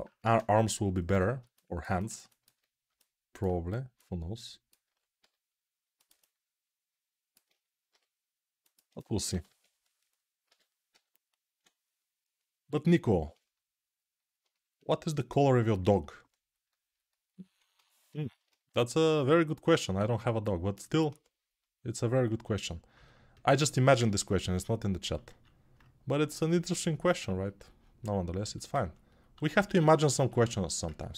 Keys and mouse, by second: 0.0 ctrl+space, 0.8 n, 1.7-12.5 ctrl+alt+middle drag, 9.4 ctrl+Tab, 10.2 g, 10.7 ], 12.5-31.1 alt+drag.